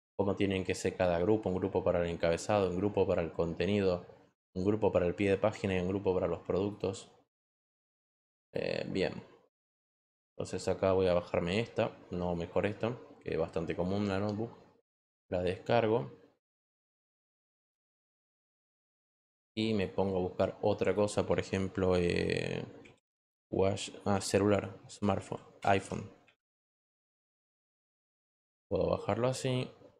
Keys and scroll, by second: 21.8 w, 23.2-27.8 typing.